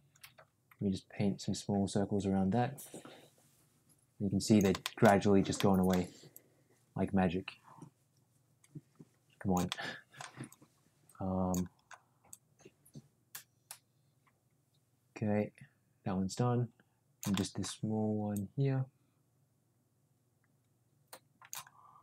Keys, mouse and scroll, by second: 4.8 shift+middle click, 5.6 middle click, 6.3-9.6 drag, 9.7 middle click, 10.5-11.5 drag, 12.2-17.2 drag, 17.3 middle click, 18.3-21.5 drag.